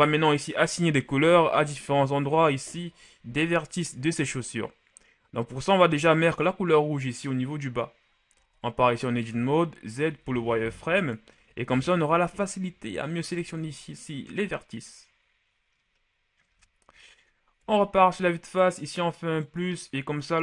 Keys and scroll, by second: 8.7 Tab, 9.5 z, 10.3 z, 11.8 b, 18.0 KP_1.